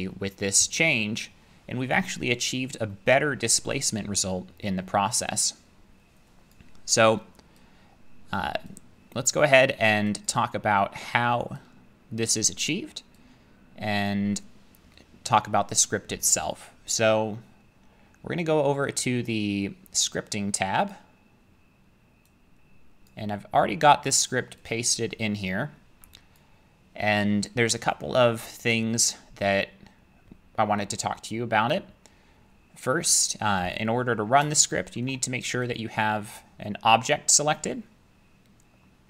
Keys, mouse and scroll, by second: 1.9-2.5 scroll, 3.3 middle click, 4.0 middle click, 4.7-5.5 scroll, 6.5 click, 8.4 click, 9.3 click, 10.3 click, 12.3 click, 14.1 click, 16.9 click, 20.9 click, 23.1 click, 32.9 middle click, 33.0 middle click, 33.1 middle click, 35.0 shift+middle click, 35.8 click, 36.9 click.